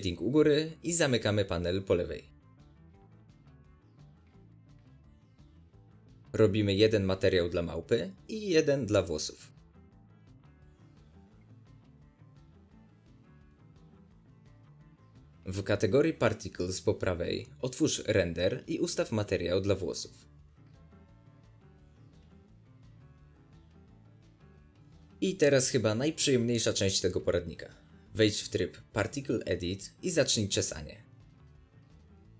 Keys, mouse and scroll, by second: 0.3-2.1 drag, 2.6-4.4 middle drag, 3.2 scroll, 4.4-5.4 right drag, 5.3 scroll down 2, 5.4 shift+middle click, 5.6-6.0 scroll up 2, 6.1 drag, 6.9-7.9 drag, 8.7 drag, 9.6-11.5 drag, 9.7 Return, 12.2-14.1 drag, 24.4 click, 25.0 scroll down 2, 25.1-28.6 middle drag, 26.1 scroll up 2, 28.6 click, 28.8-29.3 shift+middle drag, 29.0 scroll down 2, 29.3-30.6 drag, 30.6 middle click, 31.1 click, 31.4-31.8 middle drag, 31.8 click.